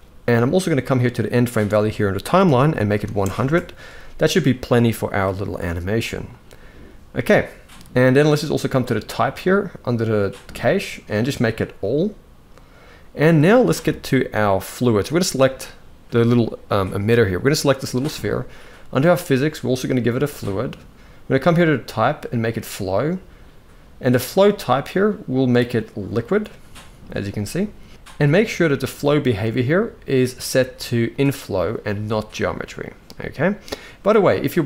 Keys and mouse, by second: 0.8-3.1 drag, 2.7 0, 5.3 shift+middle click, 10.8-11.7 drag, 14.7 click, 21.2-22.3 drag, 24.4-25.9 drag, 28.8 click, 29.4-31.0 drag.